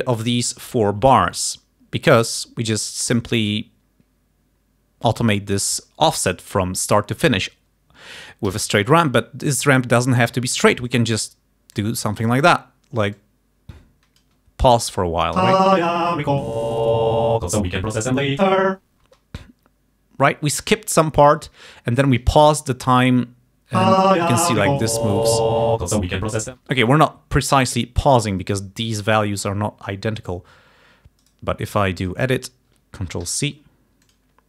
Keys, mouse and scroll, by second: 5.2 click, 8.6 d, 9.0 click, 9.7-11.2 drag, 11.9 click, 12.5 click, 13.3-14.5 drag, 15.5 space, 19.2 space, 23.8 space, 26.6 space, 31.3 right click, 32.1 click, 33.3 ctrl+c, 34.1 click.